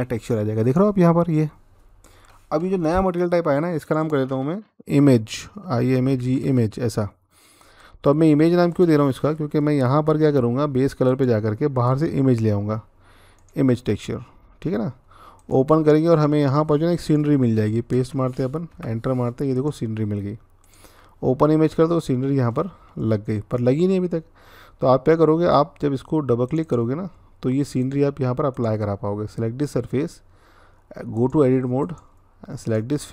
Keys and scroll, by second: 5.4-6.1 typing, 17.7 ctrl+v, 18.5 Return.